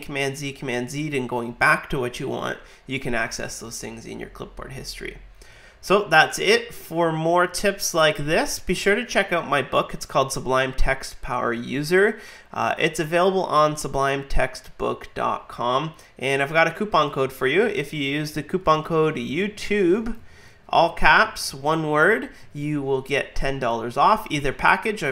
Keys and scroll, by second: 17.6 super+t, 18.4-20.2 typing.